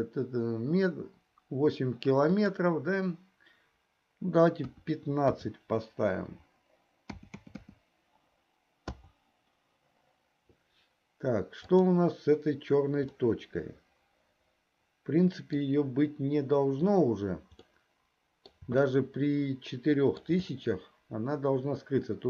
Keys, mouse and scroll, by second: 2.3-9.2 drag, 7.3 KP_0, 13.8-16.1 middle drag, 18.3-20.3 middle drag.